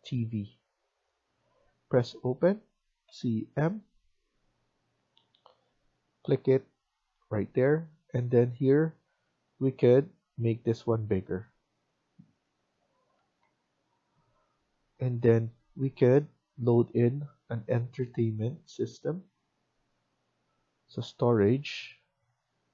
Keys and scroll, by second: 6.8 Escape, 6.8 typing, 7.1 Escape, 13.1 Escape, 13.3 Escape.